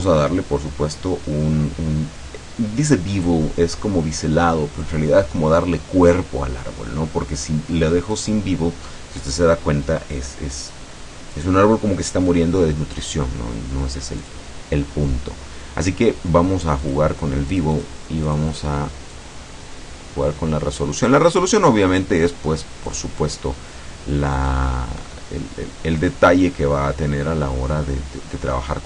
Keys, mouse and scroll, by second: 8.2 click, 14.3 click, 16.9 click, 17.6 click, 18.3 click, 19.2-23.2 drag, 24.5-26.3 drag, 26.7 middle click, 27.5-28.8 scroll down 1.